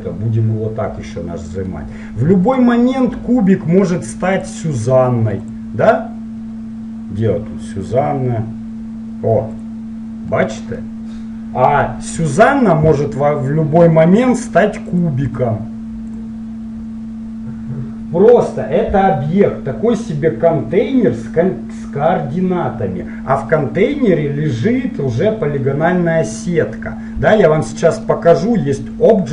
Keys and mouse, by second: 1.1-2.6 middle drag, 2.6-4.4 right drag, 4.5-7.5 drag, 10.3-12.1 middle drag, 12.5-15.3 right drag, 14.3-17.2 drag.